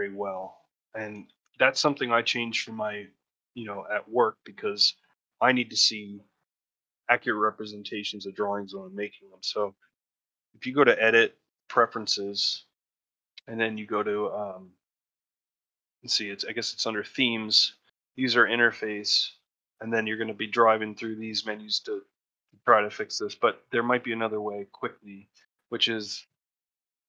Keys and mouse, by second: 0.2 middle click, 1.2 ctrl+middle click, 1.4 shift+middle click.